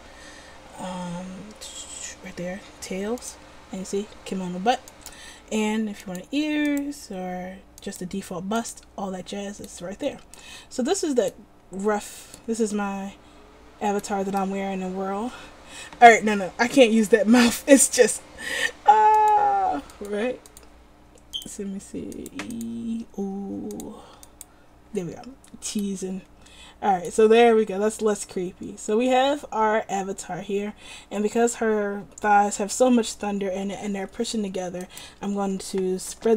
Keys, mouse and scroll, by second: 9.8-11.0 middle drag, 13.2 middle click, 19.3-26.1 middle drag, 35.2 right click.